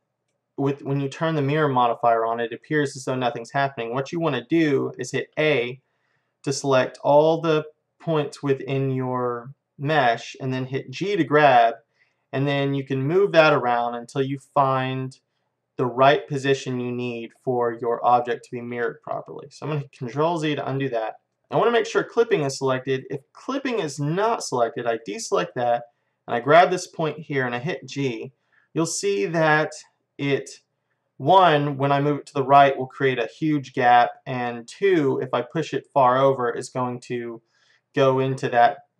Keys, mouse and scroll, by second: 0.5-5.4 middle drag, 5.4 a, 7.1-9.1 middle drag, 11.0 g, 17.5-19.2 middle drag, 20.2 ctrl+z, 20.9 middle click, 22.4-24.3 middle drag, 24.3-28.2 drag, 27.8 g.